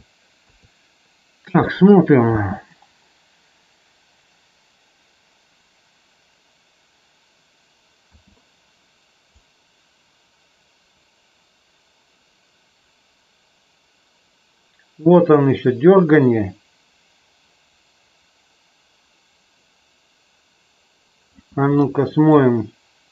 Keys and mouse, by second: 0.5 KP_3, 2.3 space, 8.1 space, 9.4-21.4 drag, 21.7-22.3 middle drag.